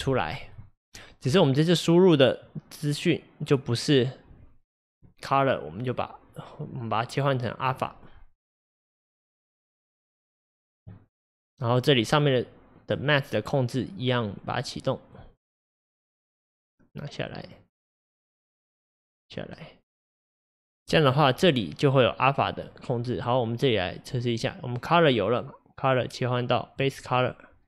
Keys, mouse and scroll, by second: 1.5-2.5 scroll up 6, 2.5 click, 7.7 click, 8.4 drag, 10.1 click, 11.3-15.1 middle drag, 15.1 click, 17.5 click, 19.1-20.1 drag, 22.4-26.8 middle drag, 26.8 click.